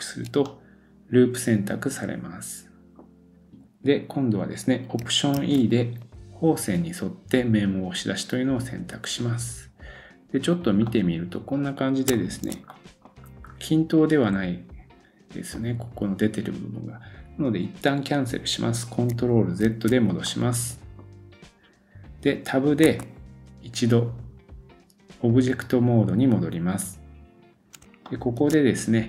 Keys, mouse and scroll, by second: 0.2-5.0 middle drag, 3.2 scroll down 1, 5.0 alt+click, 5.4 alt+e, 5.7-19.1 middle drag, 13.2-13.7 scroll up 2, 13.9-14.3 scroll down 1, 19.7 ctrl+z, 19.8-22.8 middle drag, 22.8 Tab, 27.8 shift+click, 28.5-29.0 middle drag.